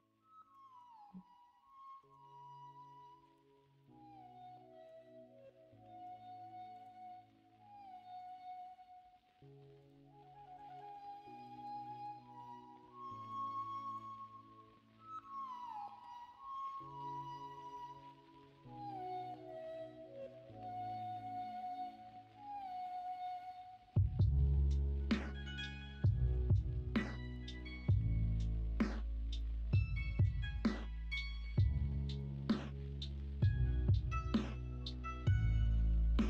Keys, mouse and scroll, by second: 0.4 middle click, 1.6-3.4 shift+middle drag, 1.9 shift+s, 3.8-4.8 middle drag, 5.6 ., 8.5 ., 10.5 s, 11.8 ctrl+z, 12.2 middle click, 15.1 middle click, 15.6 shift+middle click, 16.7-18.0 middle drag, 19.4 middle click, 20.7 s, 21.5 ctrl+z, 23.1 s.